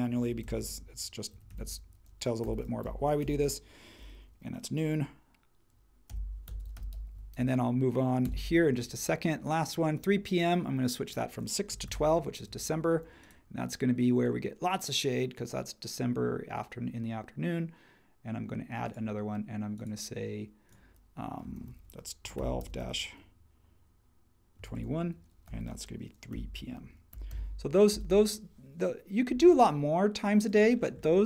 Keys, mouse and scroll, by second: 0.0-3.3 typing, 5.8-7.8 typing, 8.2 Return, 11.4-12.4 typing, 12.5 Tab, 21.9-23.1 typing, 24.3-27.8 typing, 27.9 Return.